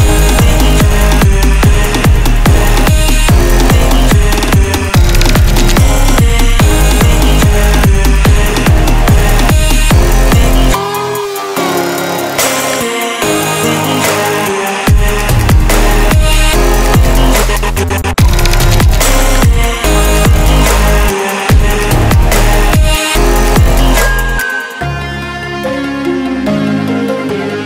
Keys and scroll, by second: 17.1 ctrl+z.